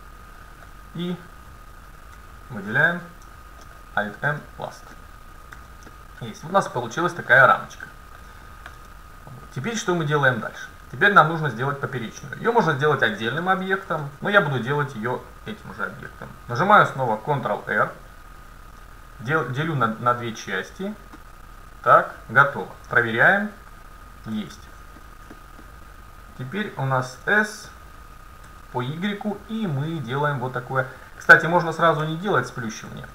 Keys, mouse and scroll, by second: 1.7-4.3 right drag, 3.7 alt+m, 5.0 middle click, 5.6 a, 7.6 middle click, 8.9 KP_7, 13.5-14.2 scroll down 1, 14.2 scroll up 1, 14.8-16.3 middle drag, 16.9 ctrl+r, 23.0 middle click, 24.8-27.7 middle drag, 27.3 s, 31.7 middle click, 32.1 KP_7.